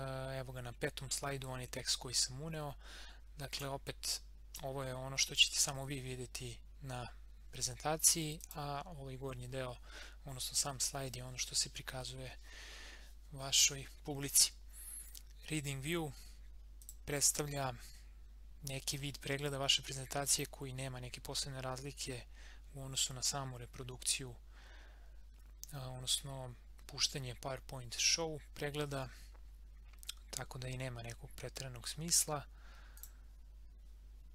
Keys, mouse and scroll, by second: 3.5-6.8 drag, 8.4 click, 16.8 click, 32.9 click.